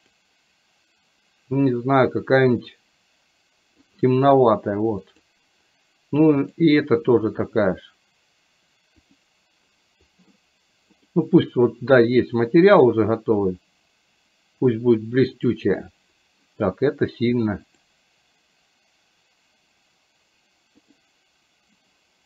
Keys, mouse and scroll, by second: 0.1 click, 5.2 click, 6.6-9.2 drag, 11.1 click, 12.9-15.9 drag, 17.7-21.0 drag.